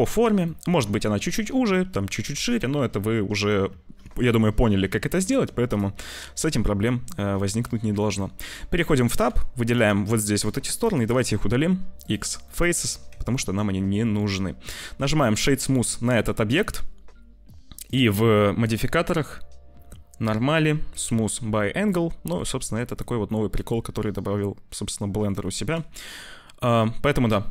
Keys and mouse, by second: 0.3 middle click, 5.5 middle click, 6.1 middle click, 6.7 click, 7.0 middle click, 7.8 Tab, 8.6 click, 9.1 3, 9.5 click, 9.9 middle click, 10.6 shift+click, 11.0 x, 12.4 click, 12.5 Tab, 13.1 ctrl+s, 13.2 click, 14.1 shift+middle click, 15.6 t, 15.7 middle click, 16.4 z, 17.8 click, 18.7-21.0 drag, 21.8 middle click, 23.2-25.1 middle drag, 25.7 ctrl+s, 25.9-27.5 middle drag.